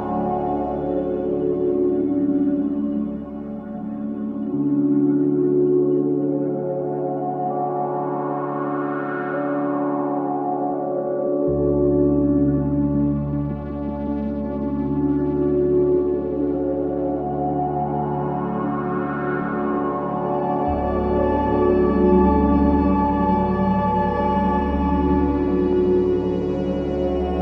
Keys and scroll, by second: 6.6 0, 6.9 9, 7.0 Return, 8.0 3, 9.3 4, 15.1 F1, 18.8 F1, 24.5 F9.